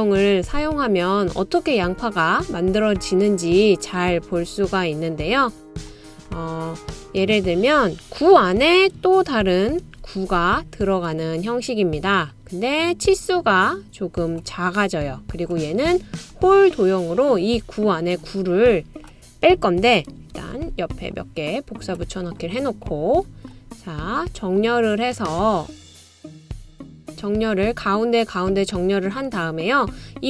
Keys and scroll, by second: 9.7 super+c, 10.2 super+v, 20.5 super+c, 20.7 super+v.